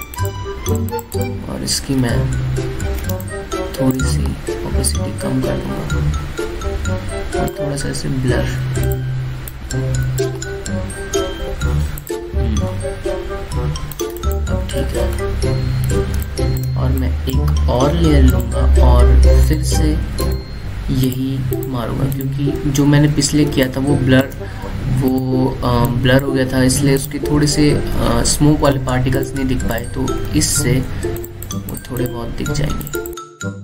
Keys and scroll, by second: 3.8 alt+space, 16.8 space, 23.7 ctrl+z, 24.2 ctrl+space, 31.3 ctrl+z.